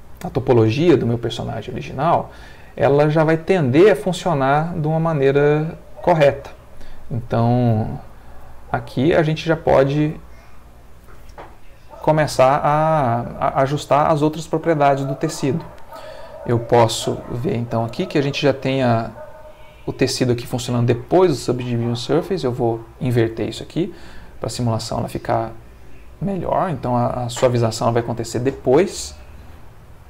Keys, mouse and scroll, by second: 15.3 Escape, 16.8 click, 17.8 click, 21.1-22.6 drag, 23.6 space.